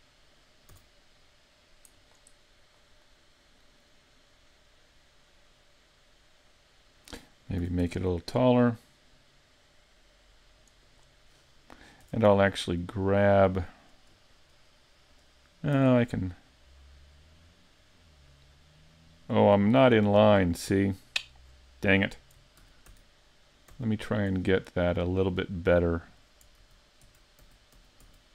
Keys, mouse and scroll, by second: 0.7 s, 2.1 click, 3.1 middle click, 7.6 s, 11.0 click, 12.1 Tab, 12.8 middle click, 15.8 Tab, 16.1 middle click, 20.4 scroll up 3, 20.8 middle click, 21.5-22.0 scroll down 5, 22.0 middle click, 22.6 super+z, 22.9 super+z, 23.8 super+z, 24.5 middle click, 26.6 z, 27.1 z, 27.9 super+z, 28.0 super+z.